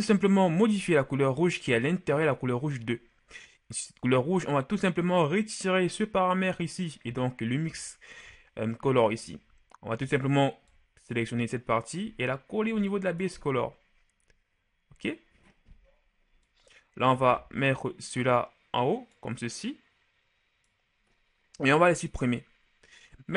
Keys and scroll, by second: 22.2 Delete.